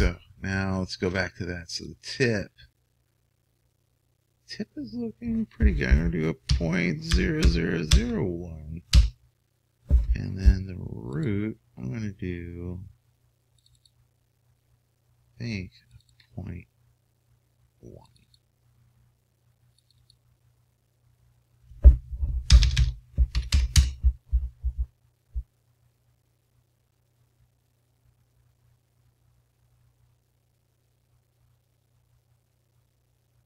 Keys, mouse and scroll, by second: 2.6-4.2 drag, 8.3 KP_0, 15.6-22.6 drag, 23.2 BackSpace.